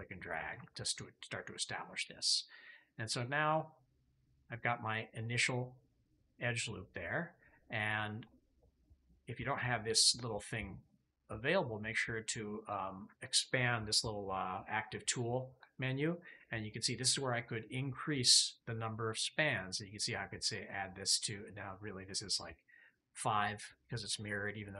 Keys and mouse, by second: 3.1-8.1 drag, 12.5 click, 19.3 click, 22.0 click.